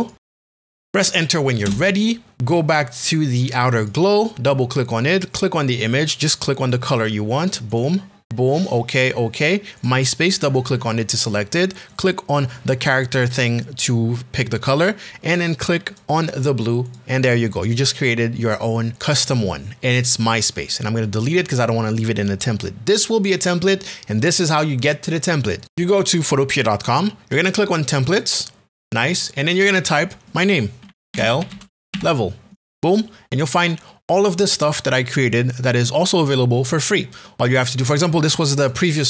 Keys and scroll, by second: 0.8 Up, 1.6 Return, 30.5-32.4 typing.